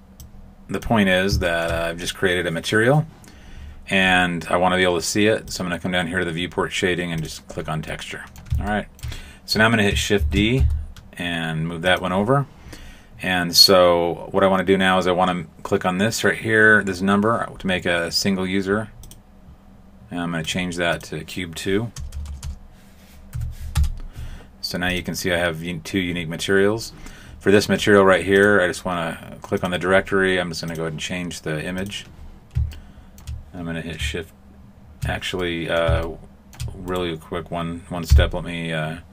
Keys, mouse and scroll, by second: 0.2 click, 1.1-1.4 scroll down 1, 1.4 shift+middle click, 5.4 click, 7.8 middle click, 8.7 shift+middle click, 10.2 shift+d, 19.0 click, 20.4 click, 22.1 BackSpace, 22.2 BackSpace, 24.8 click, 29.5 click, 31.8 click, 32.7 shift+middle click, 35.4 middle click, 36.0 shift+middle click, 36.8 right click, 38.0 x.